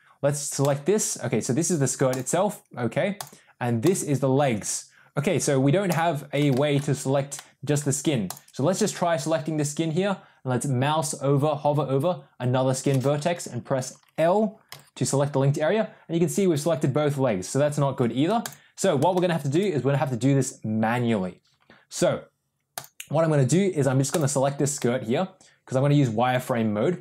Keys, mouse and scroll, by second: 0.5 click, 3.0 click, 6.4 shift+middle click, 7.2 middle click, 8.2 click, 14.6 l, 19.0 shift+middle click, 22.6 click, 24.0 click, 24.7-27.0 middle drag.